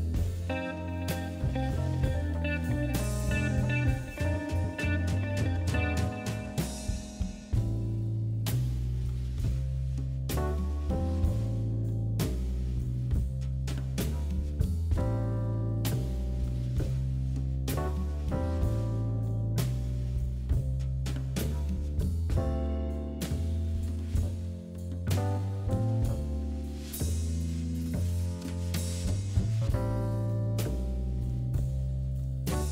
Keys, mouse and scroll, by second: 3.3-4.5 drag, 4.8 right click, 5.2 click, 6.3 right click, 7.8 click, 8.9 click.